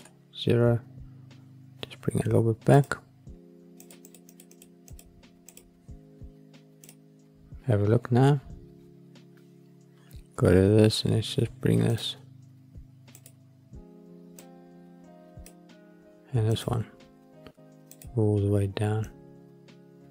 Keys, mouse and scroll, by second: 2.6 click, 3.7 click, 4.0 click, 4.2 click, 4.5 click, 4.8 click, 5.4 click, 8.0 click, 9.3 click, 11.8-13.2 drag, 17.8 click.